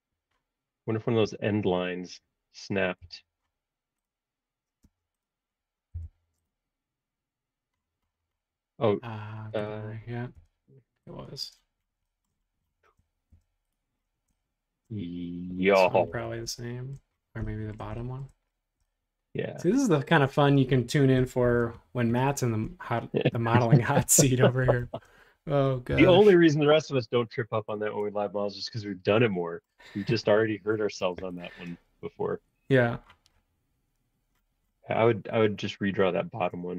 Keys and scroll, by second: 1.8 shift+g, 3.0 l, 4.8 space, 5.9 l, 10.3 e, 11.4 space, 13.3 shift+g, 21.4 shift+g, 24.0 shift+g, 24.8 shift+g, 25.9 l, 28.0 space, 31.0 shift+g.